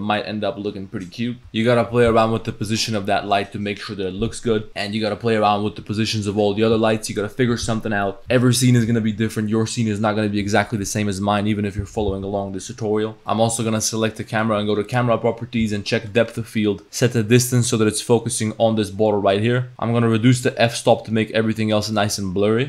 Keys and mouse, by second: 4.7 g, 5.6 middle click, 13.2 click, 13.6 click, 16.1-16.7 drag, 16.9-18.0 drag, 19.1 click, 20.5-22.0 drag.